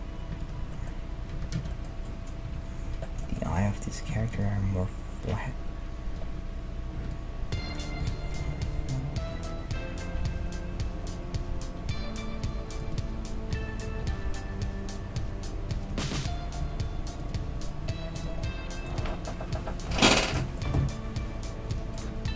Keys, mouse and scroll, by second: 0.9-5.1 middle drag, 1.3 a, 1.5 z, 2.5 KP_3, 3.5 a, 4.1 a, 4.4-6.3 drag, 7.1-8.9 drag, 8.0 s, 13.5 g, 15.9 Tab, 16.6 r, 17.4 g, 18.4-21.0 middle drag, 18.9 z, 20.7 r, 21.9 middle click.